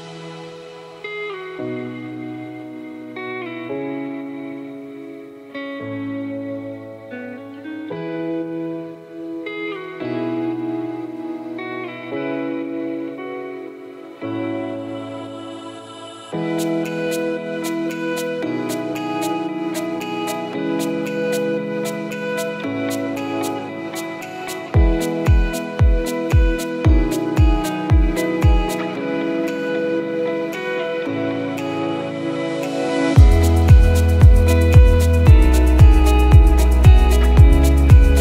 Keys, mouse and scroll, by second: 1.8 click, 2.5 click, 4.8 click, 5.6-6.0 scroll down 5, 6.0-6.6 scroll up 2, 7.4 click, 9.0 click, 11.4 click, 12.4 click, 13.3 click, 14.1-14.5 scroll up 4, 14.4 click, 16.3 click, 16.5 Tab, 17.2-17.9 scroll up 1, 19.7 alt+click, 20.5 x, 21.8 click, 23.0 click, 24.8 click, 25.5 click, 27.6 click, 31.1 alt+click, 31.9 scroll up 1, 32.4 scroll down 1, 33.5 click, 34.3 click.